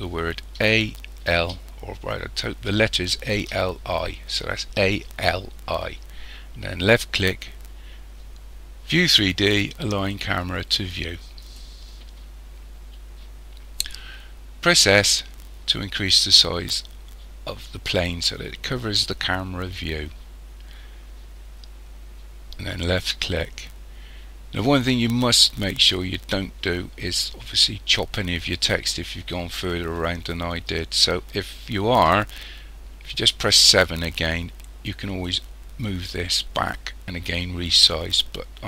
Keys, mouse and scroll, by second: 14.7 s, 33.4 KP_7, 35.2 click.